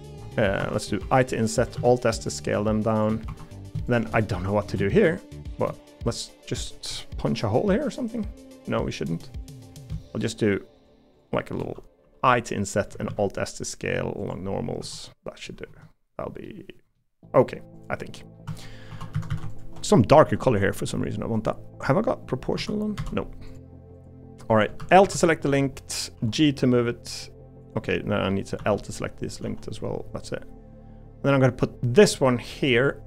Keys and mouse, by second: 1.0 i, 1.7 alt+s, 3.2 3, 3.6 click, 4.2 middle click, 5.3 click, 5.7 middle click, 6.9-9.8 middle drag, 13.0 alt+s, 14.8 3, 15.1 middle click, 15.7 Tab, 16.4 middle click, 17.2 middle click, 18.2 middle click, 18.9 3, 19.1 a, 19.3 a, 20.5 g, 22.6 o, 23.0 o, 24.8 l, 25.0 KP_7, 26.1 g, 28.6 l, 29.4 g.